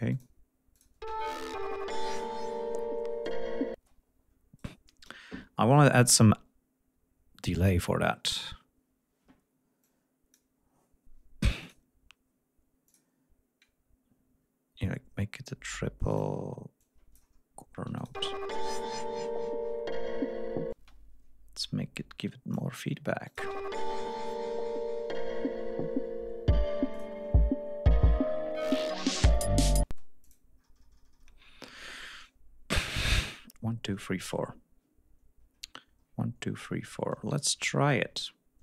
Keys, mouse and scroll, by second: 1.1 space, 2.5 ctrl+scroll down 2, 3.3 ctrl+scroll up 2, 3.8 ctrl+space, 4.6 right click, 7.6 click, 11.7 click, 12.9 click, 16.1 click, 16.8 click, 18.0 click, 18.2 space, 20.8 space, 21.7 click, 23.3 click, 23.4 space, 27.0 click, 37.9-38.6 ctrl+drag.